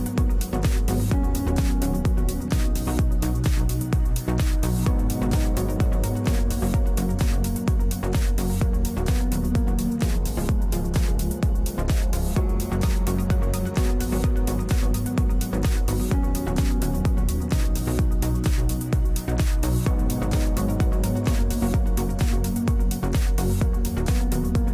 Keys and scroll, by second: 1.7 4, 16.0 1, 18.0 ctrl+Delete.